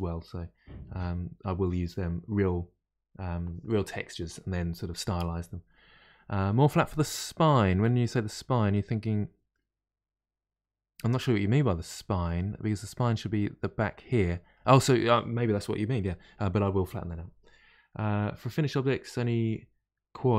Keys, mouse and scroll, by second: 8.1-17.2 middle drag.